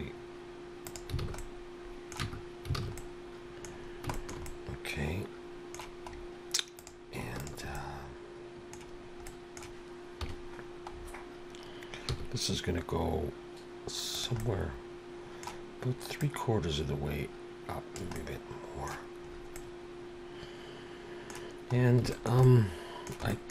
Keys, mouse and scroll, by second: 1.2 alt+a, 1.4 middle click, 2.2 Tab, 2.8 alt+a, 3.0 middle click, 3.8 scroll down 3, 4.1 shift+middle click, 4.5 middle click, 6.1-6.5 scroll up 3, 6.8 click, 7.4 shift+click, 7.7 middle click, 9.7 middle click, 10.2 KP_7, 10.9-11.3 scroll down 5, 12.2 g, 14.4 middle click, 16.2 click, 18.2 middle click, 19.3 scroll up 2, 19.5 middle click, 21.7-22.1 scroll up 2, 22.1 shift+middle click, 22.4 middle click, 23.3 shift+middle click.